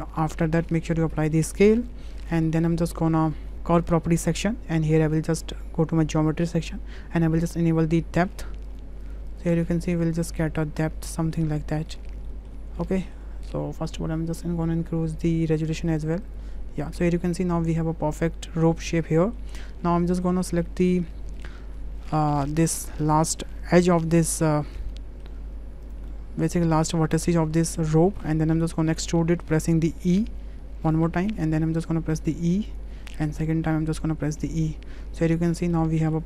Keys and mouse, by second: 1.0 ctrl+a, 2.1 middle click, 2.3 drag, 2.5 shift+middle drag, 2.7 shift+click, 3.3 middle drag, 3.9 click, 5.6 click, 8.2 click, 8.8 click, 9.1 click, 9.5 click, 10.5 middle click, 11.2 middle drag, 11.9 middle drag, 12.3 shift+middle drag, 12.8-15.6 middle drag, 15.6 click, 15.9 click, 16.9-19.4 middle drag, 20.0 middle drag, 20.7 middle click, 21.4 click, 22.4 Tab, 23.0 click, 23.9-25.2 drag, 25.9 click, 26.1 middle click, 26.7 click, 28.0 shift+click, 28.4 click, 29.0 click, 30.1 e, 31.8 e, 33.3 e, 35.3 Tab, 35.7-36.1 drag.